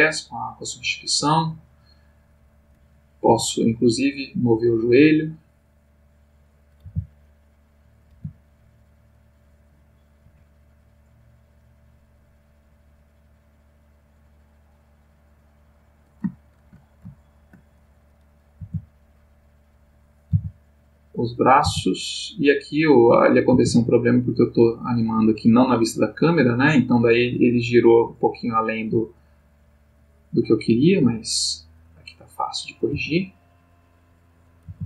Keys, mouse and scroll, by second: 2.5 click, 3.2 g, 5.0 click, 5.9 click, 6.8 r, 7.9 click, 8.1 g, 9.2 click, 9.7 click, 10.2 g, 15.7 click, 16.3-16.9 shift+middle drag, 17.2-17.7 shift+middle drag, 18.0 shift+click, 18.5 r, 19.6 click, 20.0 click, 20.3 r, 21.0 click, 21.5 click, 21.6 r, 22.3 click, 23.1 click, 23.5 r, 24.2 click, 26.6 click, 29.4 click, 32.2 click, 32.9 g, 33.7 click, 34.3 click, 34.7 r.